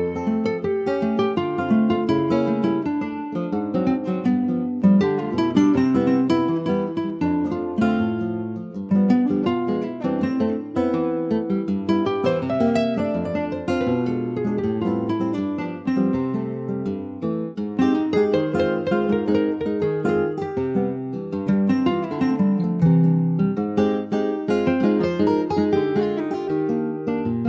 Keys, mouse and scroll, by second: 1.1 click, 3.0 middle click, 3.3 alt+z, 3.8-4.1 scroll up 3, 4.1 middle click, 5.1 alt+middle click, 5.7 alt+z, 6.2 alt+z, 7.1 click, 8.3 middle click, 8.7 alt+z, 8.8-9.8 scroll down 3, 9.8 ctrl+b, 14.1-15.4 middle drag, 15.4 shift+d, 16.4 middle click, 16.9 e, 17.4 alt+s, 19.6 middle click, 20.0 Tab, 20.2 click, 20.7 middle click, 21.1 Tab, 21.3 middle click, 21.6 scroll up 2, 22.5 2, 22.7 click, 23.6 click, 24.4 alt+shift+click, 25.0 middle click, 25.8 alt+shift+click, 26.2-26.8 scroll up 2, 26.8 ctrl+b.